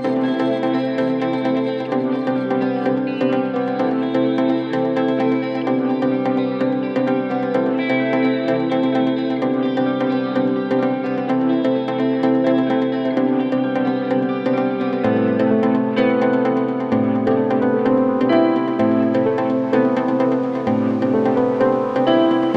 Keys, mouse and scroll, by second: 1.3 click, 1.4 scroll down 1, 1.6-2.0 scroll up 2, 3.4 click, 3.7 scroll down 4, 4.0-6.7 drag, 6.7 g, 7.9 click, 8.3 g, 10.0-10.3 scroll down 1, 10.3 click, 11.4 click, 12.3-13.5 right drag, 14.0 click, 14.4 g, 15.3 click, 15.4 x, 16.1 g, 17.7 click, 19.6 ctrl+y, 20.1 ctrl+z, 20.3 ctrl+z, 20.6 click, 21.2 g, 22.2 click.